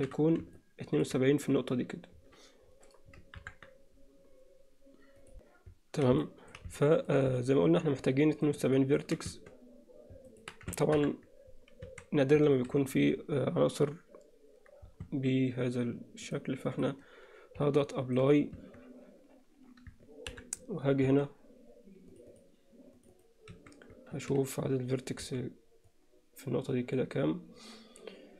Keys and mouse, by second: 0.0 shift+h, 0.6 middle click, 3.4 ctrl+KP_7, 5.4 Tab, 6.3 drag, 6.8-7.1 middle drag, 7.4-8.4 alt+middle drag, 8.6-9.0 alt+middle drag, 9.4 Tab, 10.3 alt+middle click, 11.0 ctrl+KP_7, 11.9 a, 12.6 alt+a, 15.2 Tab, 16.4-16.9 drag, 17.8-18.2 middle drag, 18.7 Tab, 20.3 ctrl+KP_7, 21.1 a, 22.1 click, 23.0 click, 23.6 a, 24.2 alt+a, 25.2 b.